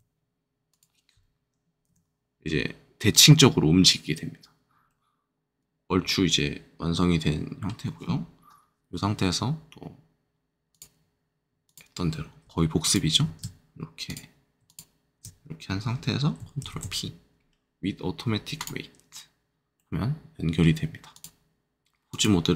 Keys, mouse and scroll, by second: 0.6 click, 1.8 g, 5.3 middle click, 5.3-5.6 scroll, 5.6 scroll down 1, 10.7-12.4 drag, 14.0 click, 14.6 shift+click, 16.6 ctrl+shift+p, 18.5 click, 19.7 middle click, 21.1 click, 21.8 ctrl+Tab, 22.1 click.